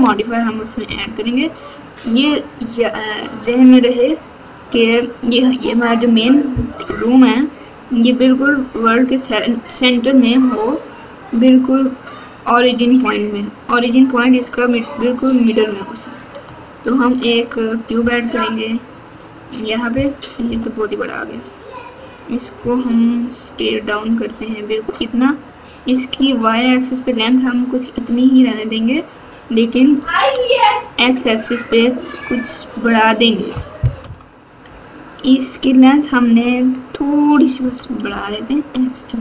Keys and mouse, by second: 0.8 KP_1, 6.8 KP_8, 8.5 KP_2, 17.0 shift+a, 20.4 KP_7, 23.9 s, 29.9 s, 37.6 s.